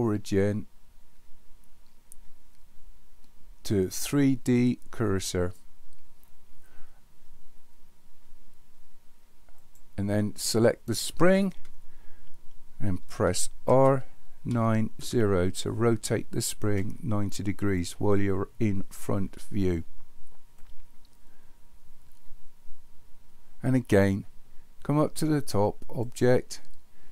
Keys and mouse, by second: 9.7 click, 13.7 r, 26.0-27.1 drag.